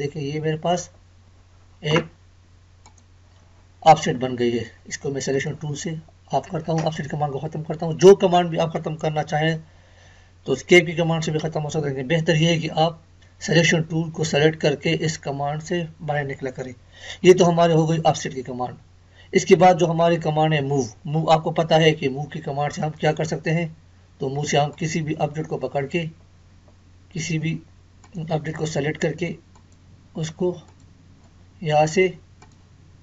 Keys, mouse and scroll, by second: 2.8 click, 5.3 click, 22.8 click, 22.8 click, 26.3 Escape, 28.0 click.